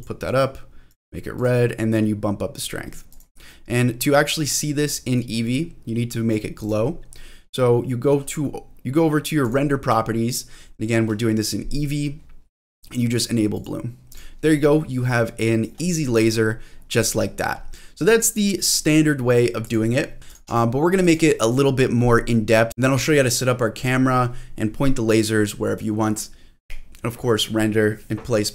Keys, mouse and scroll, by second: 1.9 click, 3.1 click, 3.4-5.1 scroll up 3, 5.1-6.3 drag, 6.6 click, 6.8-9.4 scroll down 3, 7.4-9.4 scroll up 1, 9.4 click, 13.5 click, 14.1 click, 14.4-14.8 scroll down 2, 14.7-15.7 scroll up 6, 15.7-16.7 scroll down 3, 16.7-17.2 scroll up 2, 17.7-18.2 scroll down 1, 18.2 click, 18.5 click, 18.8 click, 19.3 click, 19.6 click, 20.2 middle click, 20.2 click, 20.6 scroll up 1, 21.0 click, 22.2-22.7 scroll up 1, 22.7-23.5 scroll down 4, 23.5-24.0 scroll down 2, 24.0-26.6 scroll up 1.